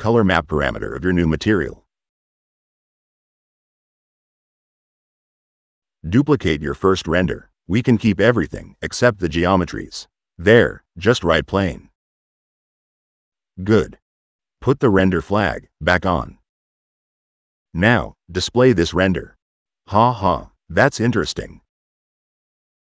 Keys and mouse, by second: 0.1 click, 1.9 click, 3.9 click, 4.5 click, 4.6 1, 4.8 click, 5.2 click, 5.9 click, 6.2-7.2 typing, 7.1 click, 9.5 click, 10.9 click, 14.5 middle click, 15.0 click, 15.5 middle click, 18.0-19.0 drag, 20.3-21.5 drag.